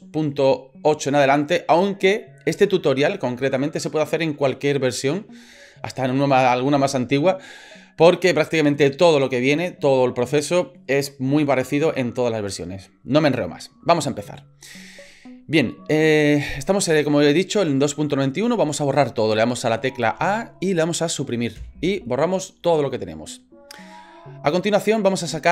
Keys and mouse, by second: 20.2 a, 21.6 Delete.